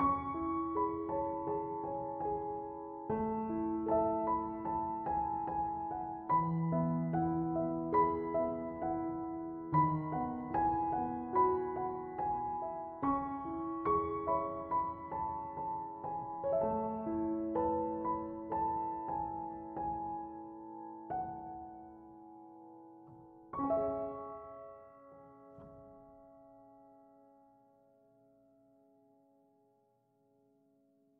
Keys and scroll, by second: 0.0-0.7 typing, 2.6 BackSpace, 3.3 m.